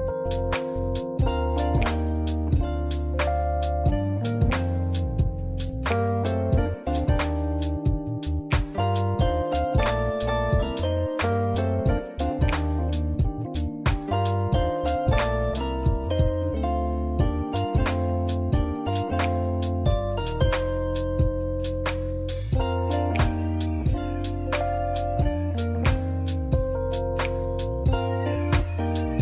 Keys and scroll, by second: 24.1 ctrl+z, 28.0 ctrl+z.